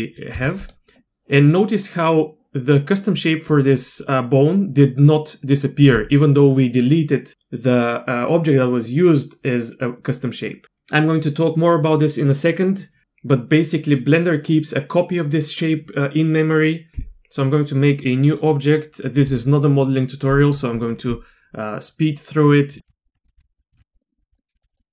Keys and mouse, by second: 0.3 x, 22.8-24.9 typing, 23.1 Tab, 23.9 click, 24.1 click.